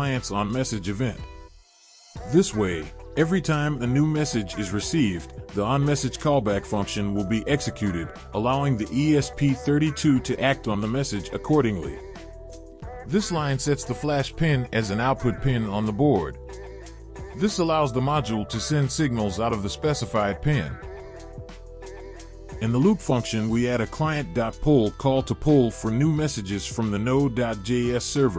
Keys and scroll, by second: 13.1 Return, 14.2 ctrl+v, 22.6 ctrl+Return, 23.3 ctrl+v, 24.4 BackSpace, 24.6 BackSpace, 26.3 ctrl+s.